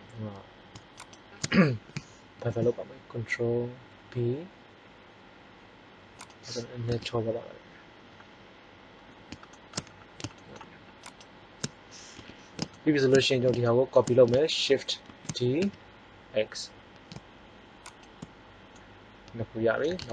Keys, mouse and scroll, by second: 2.3 ctrl+b, 6.8 Tab, 10.9-11.9 drag, 12.1 KP_1, 15.0 shift+d, 18.5-19.8 middle drag.